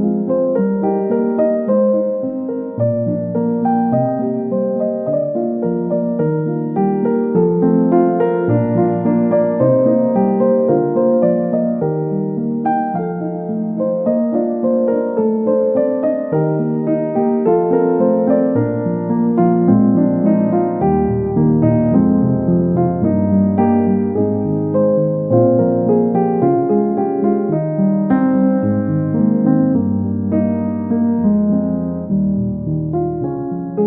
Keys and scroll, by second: 14.6 typing, 21.5 ctrl+z, 26.7 x, 33.2 ctrl+d.